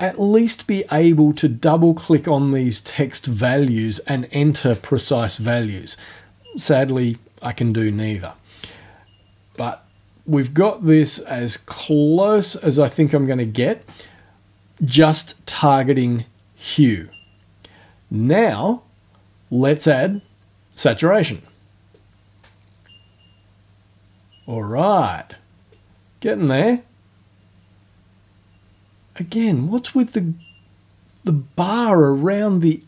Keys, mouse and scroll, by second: 9.5-11.0 drag, 11.7-12.8 drag, 20.0 click, 21.9-25.9 drag, 26.5-32.8 drag.